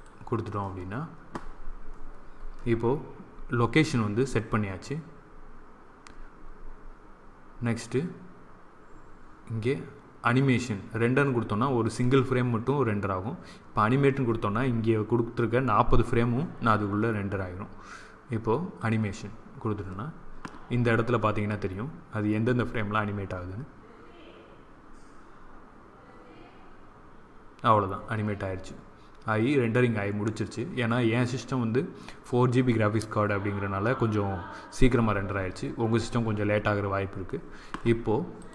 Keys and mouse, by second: 16.3-19.2 drag.